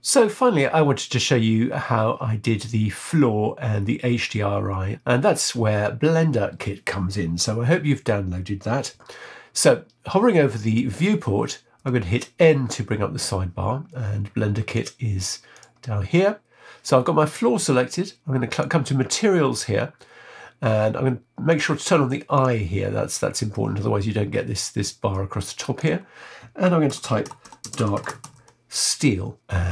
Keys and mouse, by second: 11.8 n, 18.5 click, 21.5 click, 22.3 click, 25.9-29.4 drag.